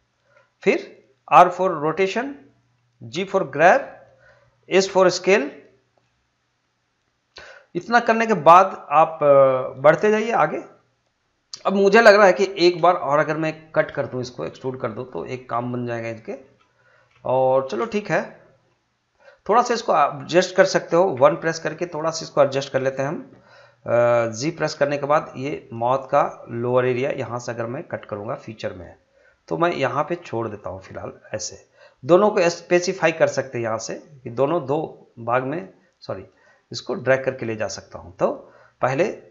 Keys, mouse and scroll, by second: 0.1 click, 1.3 r, 2.5 click, 3.1 g, 4.1 click, 4.8 s, 11.1 click, 11.1 scroll up 1, 11.9 scroll down 1, 13.2 shift+middle click, 14.1 scroll up 1, 14.6 shift+middle click, 21.1 1, 21.6-24.4 drag, 24.5 g, 26.1 click, 26.9 g, 28.0 click, 29.2 g, 31.2 click, 33.8 g.